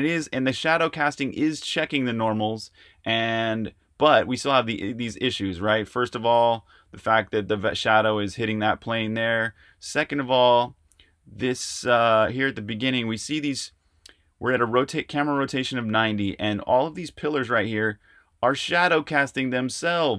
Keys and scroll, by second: 4.7-7.5 typing, 8.6-13.7 typing.